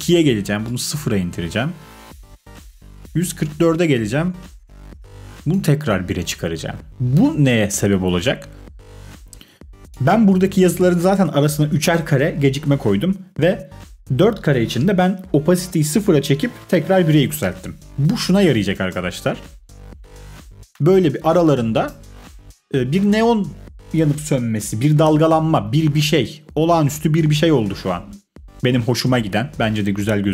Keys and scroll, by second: 18.8 space, 21.8 space.